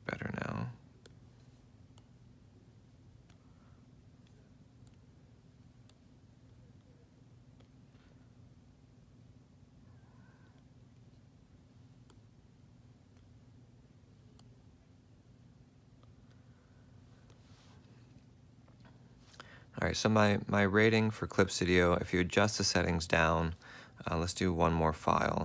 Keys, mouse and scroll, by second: 4.1 F4, 5.6 F4, 8.3 F4, 11.6 F4, 13.6 ctrl+alt+click.